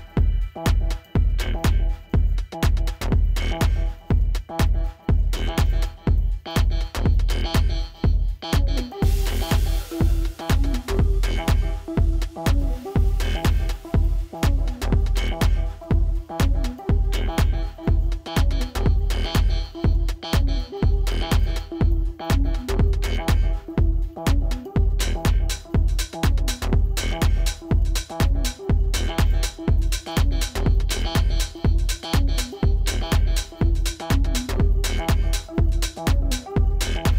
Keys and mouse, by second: 1.4 click, 3.4 right click, 5.3 click, 9.1 right click, 10.3 click, 12.0 Tab, 12.6 click, 13.8 right click, 17.4 click, 22.9 click, 27.5 click, 32.7 =, 33.1 space, 33.2 click, 34.1 ctrl+=, 35.7 ctrl+z, 36.0-37.1 typing.